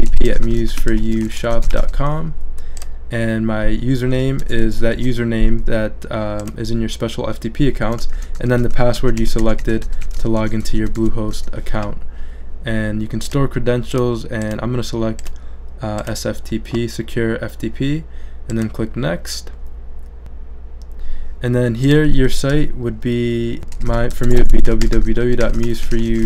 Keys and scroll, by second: 0.0-2.3 typing, 4.1 j, 4.4 BackSpace, 4.9 super+v, 23.3-26.2 typing.